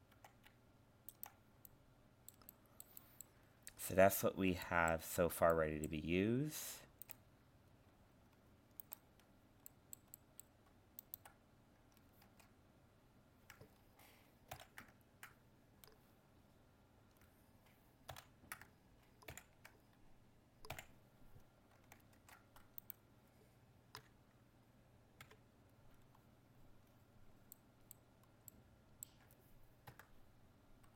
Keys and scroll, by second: 12.3 ctrl+Tab, 14.5 ctrl+l, 18.1 ctrl+l, 19.3 ctrl+i, 22.2 ctrl+Tab.